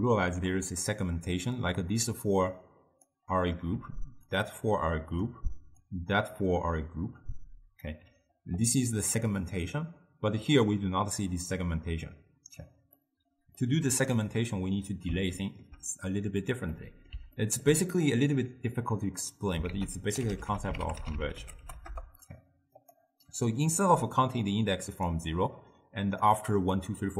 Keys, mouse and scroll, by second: 0.4-2.0 d, 2.2-3.1 drag, 3.1-5.8 typing, 4.4 click, 5.9-7.9 drag, 7.9 d, 8.0 d, 10.4 d, 13.0-19.2 middle drag, 19.2 click, 19.7 ctrl+a, 24.0 d, 24.4 click, 25.1-27.1 typing, 25.6 click, 26.5 click.